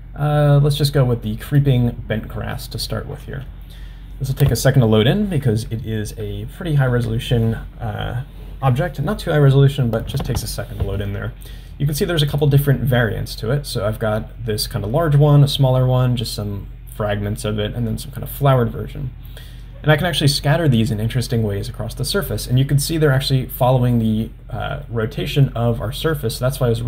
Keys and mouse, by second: 12.4-18.6 drag, 22.6-23.4 middle drag, 24.1-24.9 middle drag.